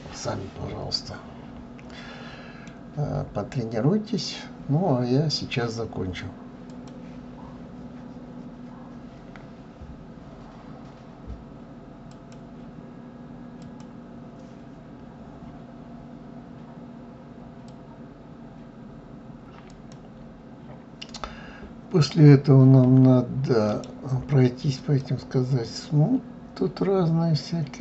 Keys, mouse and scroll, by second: 3.1-3.7 scroll up 3, 3.7-4.7 scroll down 3, 23.4 right click.